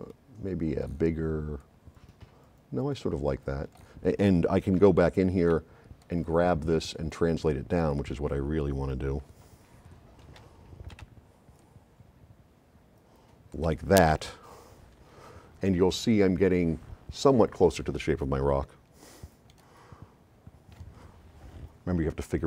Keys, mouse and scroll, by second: 4.9 right click, 4.9 s, 6.0 click, 7.4 d, 10.4 c, 11.1 v, 11.6 click, 18.7 s, 19.5-20.9 right drag.